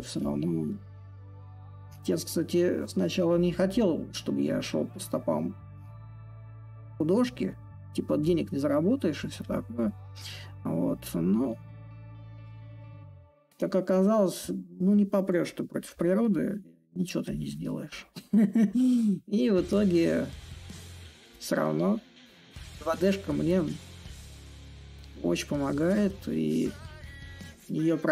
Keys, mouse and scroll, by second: 5.8-10.9 drag, 12.3-15.6 drag, 15.6 a, 16.9-22.0 drag, 23.2-26.7 drag, 27.1 click.